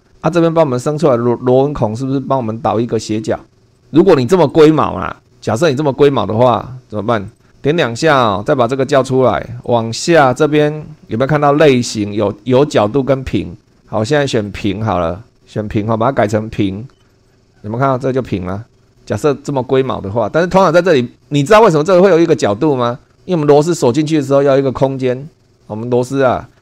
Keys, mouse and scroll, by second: 0.0 super+2, 3.7 click, 4.5 click, 7.3 click, 9.7-10.7 drag, 14.4 click, 17.0 click, 17.3 click.